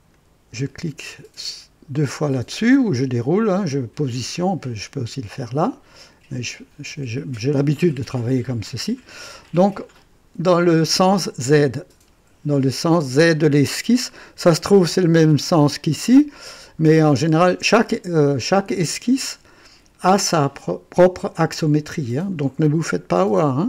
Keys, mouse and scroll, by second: 0.1 click, 5.9 click.